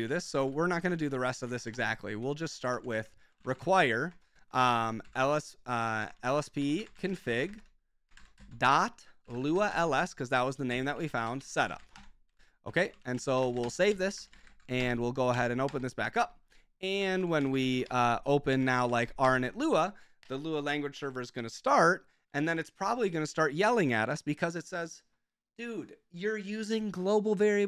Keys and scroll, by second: 0.1 ctrl+k, 0.4-14.9 typing, 0.8 ctrl+w, 1.0 ctrl+k, 1.2 Escape, 15.3 Up, 15.6 Return, 16.7-19.4 typing, 22.7 Escape.